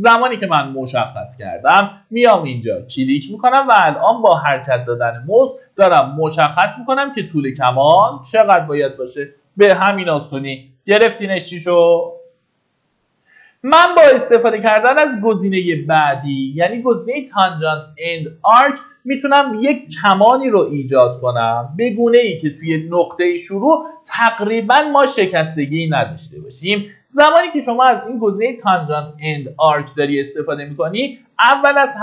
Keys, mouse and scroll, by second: 10.7 Escape, 28.0 click, 29.0-30.0 scroll down 1, 30.0 middle click.